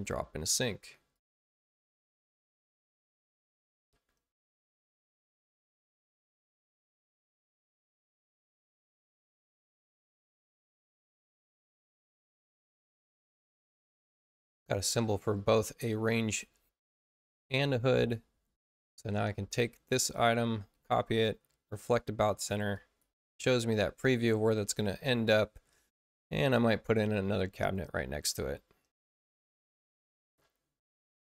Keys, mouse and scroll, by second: 1.1 click, 4.8 b, 9.7 click, 12.1 space, 12.5 click, 14.3 click, 15.3 click, 18.3 space, 18.9 click, 20.7 ctrl+alt+c, 22.7 click, 27.5 click, 30.9 click.